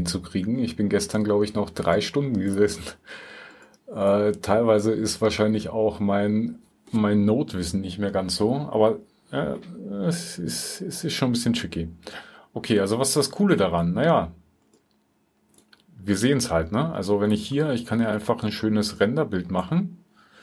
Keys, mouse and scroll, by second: 19.9 typing.